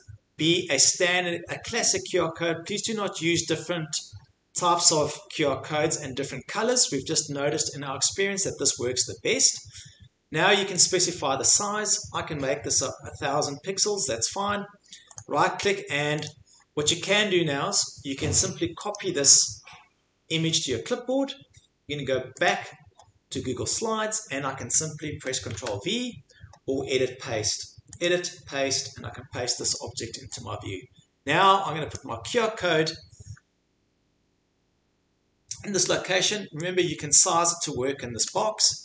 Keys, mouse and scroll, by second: 4.1 click, 7.0 scroll down 3, 9.6 scroll up 3, 10.8 click, 12.3 scroll, 12.8 click, 13.8 scroll down 2, 14.4 scroll down 3, 15.2 right click, 15.5 scroll, 16.3 click, 16.5-17.2 scroll, 18.9 click, 22.5 click, 25.5 ctrl+v, 28.0 click, 29.7 click, 31.9 click, 37.6 click.